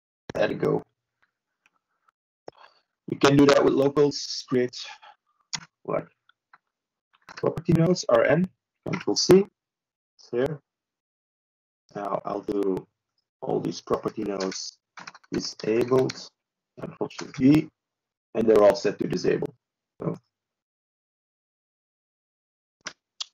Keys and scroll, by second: 17.1 ctrl+space, 18.0 ctrl+w.